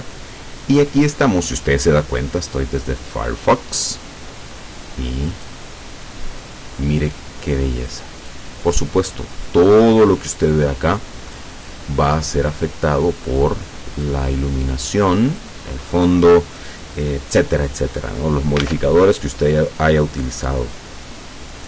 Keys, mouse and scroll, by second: 4.5-4.9 scroll down 2, 5.1 scroll down 2, 5.5-7.7 drag, 7.9 click, 8.9 click, 9.5-11.6 drag, 11.7-13.5 drag, 14.1 click, 15.0 click, 16.7-18.1 drag, 18.7 alt+Tab, 20.2-20.7 scroll down 2.